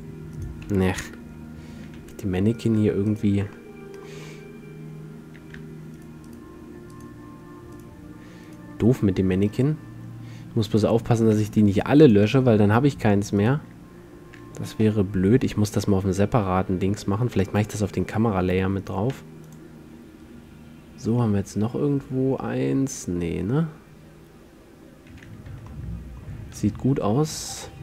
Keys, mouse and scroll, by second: 0.6 a, 1.1 KP_7, 1.9 a, 2.5 a, 6.1-10.5 middle drag, 11.7 x, 14.9 m, 18.9-20.8 right drag, 19.3 x, 21.3-22.4 middle drag, 22.4 drag, 22.8 click, 22.9-24.4 middle drag, 25.6 z, 25.8-27.7 middle drag, 27.7-27.8 drag.